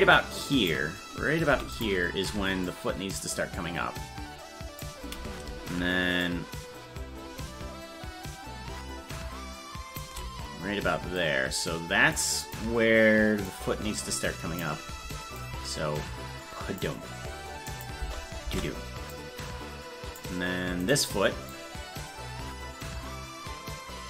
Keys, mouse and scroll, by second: 2.7-4.8 drag, 6.2-10.0 shift+drag, 11.2 click, 12.4 click, 13.4-14.6 drag, 15.4-16.8 drag, 17.7 click, 18.0 space, 19.1-20.1 drag, 19.1 space, 20.9 right click, 21.5-24.0 drag.